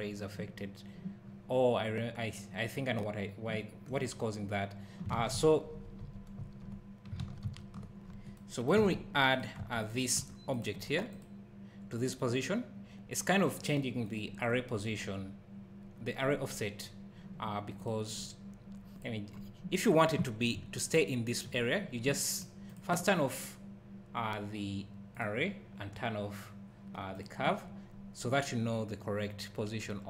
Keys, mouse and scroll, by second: 1.2 scroll down 1, 5.2 ctrl+z, 8.0 scroll up 1, 8.8 alt+a, 9.3 click, 9.6 Tab, 9.8 click, 10.2 Tab, 10.5 click, 18.1-19.0 scroll down 1, 19.0 click, 19.3-20.0 scroll up 1, 22.4 click, 25.2 click, 27.6-29.4 scroll down 1.